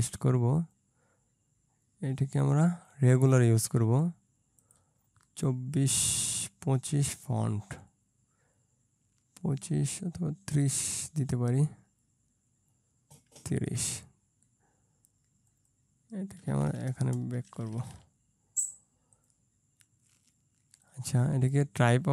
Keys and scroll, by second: 17.1 Return.